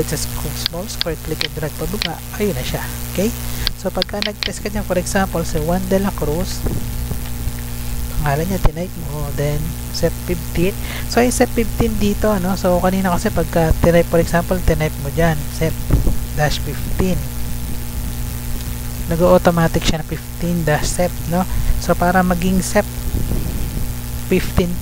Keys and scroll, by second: 5.0-8.0 typing, 8.3 Right, 11.5 Up, 11.7 Down, 12.1 Up, 14.0 Delete, 15.1-18.7 typing, 19.0 Up.